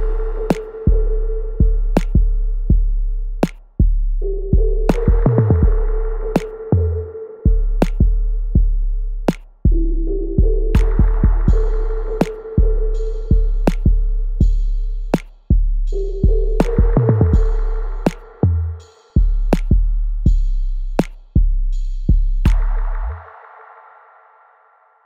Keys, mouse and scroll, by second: 2.8 alt+middle click, 3.5 alt+click, 4.1 alt+right click, 4.6 alt+middle click, 5.0 alt+right click, 6.3 click, 7.5 Tab, 8.2 click, 8.5 Tab, 10.5-10.9 scroll down 1, 11.0-16.9 alt+drag, 18.5 space, 20.1 alt+middle click, 20.5 alt+right click, 22.5 w, 23.6-25.0 drag.